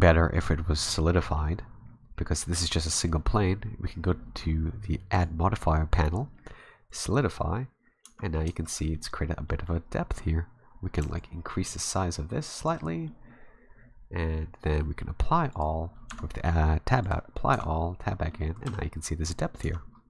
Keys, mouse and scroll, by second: 2.1-4.4 scroll down 1, 5.1 click, 8.0 Tab, 8.3 middle click, 8.5 Tab, 8.7 scroll up 1, 8.8 middle click, 9.5 middle click, 11.2 shift+click, 12.9 scroll down 1, 13.1 middle click, 14.2 s, 14.3-15.5 scroll down 2, 15.5 click, 16.1 Tab, 17.0 click, 17.5 Tab, 18.2 scroll up 1, 18.3 middle click, 18.7 a, 19.6 Tab.